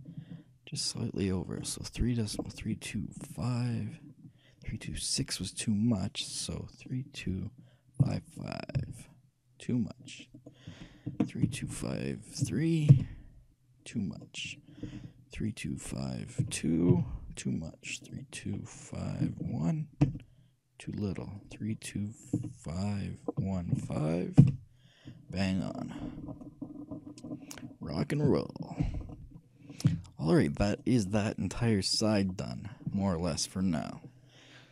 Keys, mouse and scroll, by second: 1.6-3.2 drag, 10.3-12.0 drag, 14.2-15.9 drag, 18.1-19.9 drag, 21.4-24.6 drag, 26.1-27.6 middle drag, 27.7 middle click, 27.9 middle click, 28.6-30.9 shift+middle drag, 30.0 shift+z, 31.4 middle click, 31.6-33.3 middle drag, 33.8-34.7 scroll up 1.